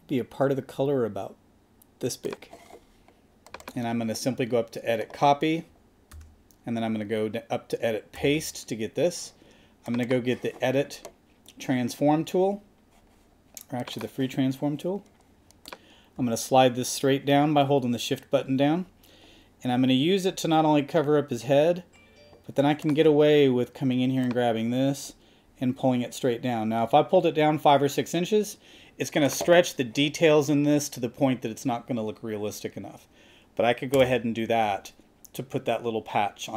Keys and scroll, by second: 6.1 super+c, 8.2 super+v.